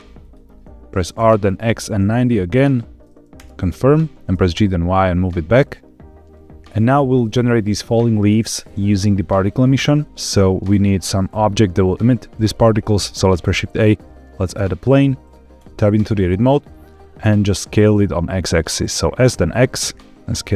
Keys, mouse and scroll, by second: 0.1 click, 1.0 r, 1.5 x, 1.9 KP_9, 2.0 KP_0, 4.2 KP_Enter, 4.2 g, 4.4 y, 6.3 click, 6.3-7.0 scroll down 1, 13.1 shift+a, 15.5 Tab, 16.3 scroll down 2, 16.6 middle click, 17.8 s, 19.2 x.